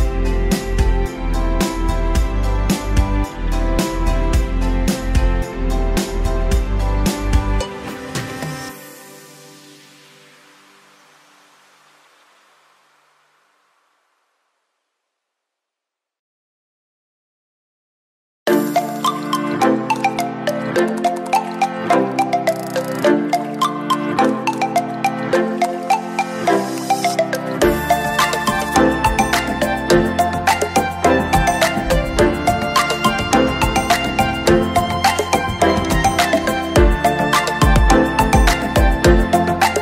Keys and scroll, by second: 1.0 ctrl+shift+j, 26.7 ctrl+shift+j, 28.2 ctrl+?, 35.3 ctrl+?.